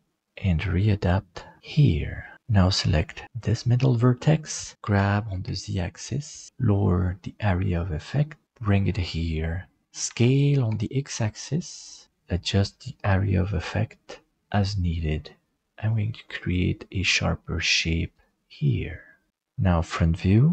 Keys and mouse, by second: 2.3 middle click, 3.3 right click, 4.8 g, 10.0 s, 19.9 shift+middle click.